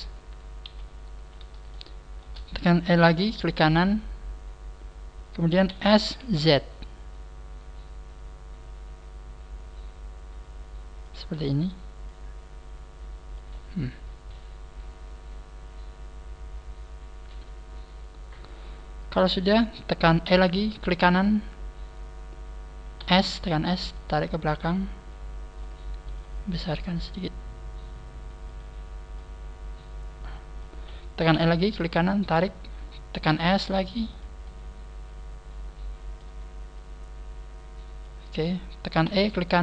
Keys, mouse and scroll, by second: 0.6 KP_1, 1.2 scroll down 1, 1.6 shift+middle click, 3.0 e, 5.0 right click, 5.6 s, 12.0 click, 20.8 e, 22.2 right click, 23.0 s, 23.9 click, 24.4 click, 24.4 click, 26.0 s, 29.2 click, 31.3 e, 31.7 right click, 32.2 click, 32.2 right click, 32.2 click, 33.2 s, 34.2 click, 34.4 middle click, 36.7 click, 39.0 e, 39.4 right click.